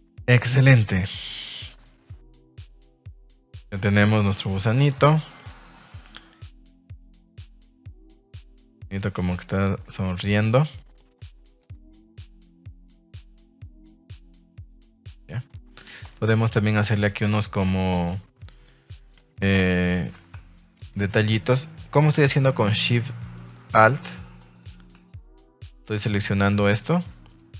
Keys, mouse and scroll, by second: 0.0 middle click, 3.5-4.2 middle drag, 5.0 middle click, 5.2 shift+middle drag, 5.7 middle click, 6.7 middle click, 7.1-7.5 middle drag, 7.8 middle click, 8.3 Tab, 8.5 middle click, 9.0 Tab, 9.1 right click, 9.3 Tab, 9.7 shift+middle click, 10.3-10.8 middle drag, 11.1 middle click, 11.5 right click, 11.9 middle drag, 12.3 g, 13.1 click, 14.3 click, 14.5 Tab, 14.8 middle drag, 15.2 shift+middle drag, 15.4 middle drag, 15.7 Tab, 16.0 shift+middle click, 17.8 click, 19.1 alt+right click, 19.9 alt+shift+right click, 20.7 alt+shift+right click, 22.2 shift+middle click, 22.5 middle click, 23.3 alt+shift+right click, 23.8 shift+middle click, 24.0 middle click, 24.5 shift+middle click, 25.2 alt+shift+right click, 26.0 alt+shift+right click.